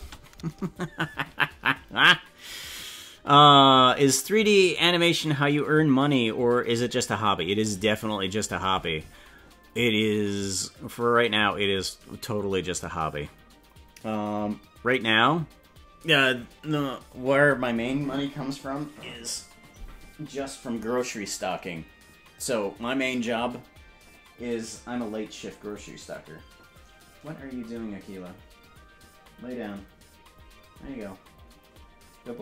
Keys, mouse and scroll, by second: 0.0 space.